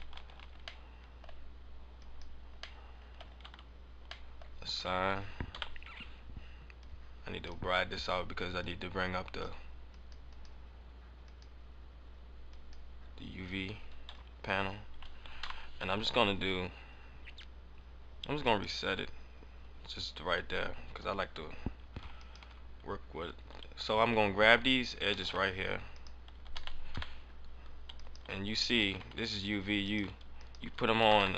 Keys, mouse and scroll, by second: 0.2 alt+z, 0.5 scroll up 1, 0.7 middle click, 1.9 click, 2.7 middle click, 3.4 Tab, 4.2 middle click, 4.7 Tab, 5.4 KP_7, 6.3 KP_7, 6.7 click, 7.4 click, 8.5 click, 10.2 click, 11.1 click, 13.3 scroll down 1, 14.1 Tab, 14.6 Tab, 15.3 u, 19.9 scroll up 1, 22.2 alt+right click, 25.0 s, 25.9 right click, 26.5 s, 28.0 right click, 28.8 s, 29.9 right click, 30.3 alt+right click.